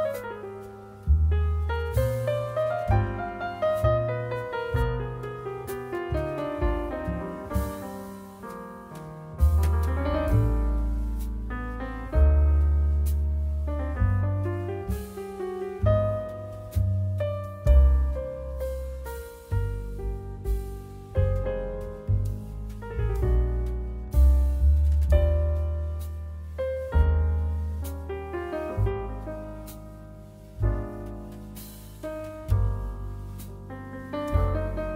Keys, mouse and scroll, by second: 0.3-1.5 middle drag, 1.6 shift+middle click, 1.7 shift+click, 1.7 shift+right click, 1.8 middle click, 1.9 click, 1.9 right click, 2.9-5.2 middle drag, 9.7 click, 9.7 middle click, 9.7 right click, 11.0 click, 11.0 middle click, 11.0-34.9 right drag, 13.1 g, 20.9 shift+click, 20.9 shift+middle click, 23.4 n, 24.9 click, 24.9 middle click, 25.9 click, 25.9 middle click, 27.2 n, 29.5 n.